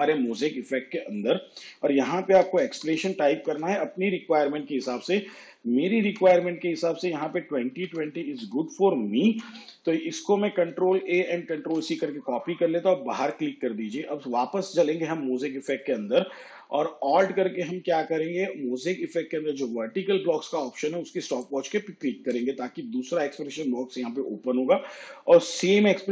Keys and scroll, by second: 2.2-9.4 typing, 10.9 ctrl+a, 11.7 ctrl+c.